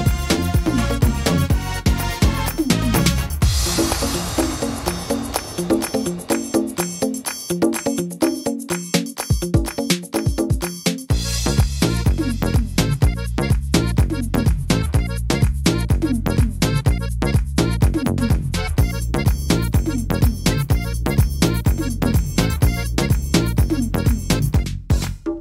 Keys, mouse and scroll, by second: 0.1 shift+middle click, 1.4 click, 2.8 middle click, 4.6 shift+e, 6.3 click, 9.0 shift+e, 9.7 middle click, 10.6 click, 11.5 scroll up 1, 11.6 middle click, 12.4 scroll up 2, 12.9 middle click, 13.2-13.6 scroll down 5, 14.9 l, 17.8 middle click, 17.8 a, 18.5 click, 20.5 middle click, 22.2 click, 25.0 middle click.